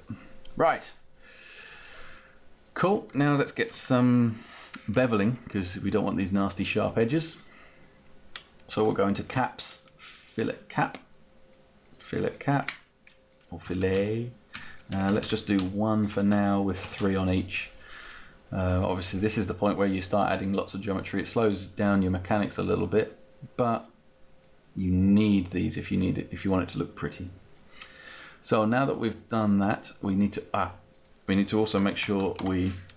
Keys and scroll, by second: 3.0-4.3 typing, 13.6 Down, 16.2 Up, 31.3-32.9 typing.